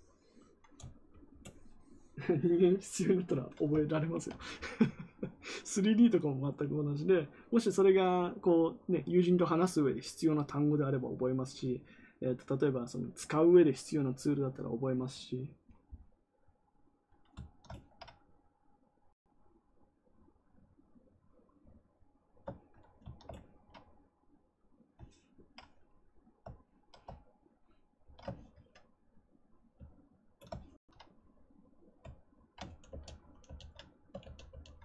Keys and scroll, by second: 32.8 ctrl+d, 33.4 ctrl+d, 34.1 ctrl+d, 34.4 ctrl+d.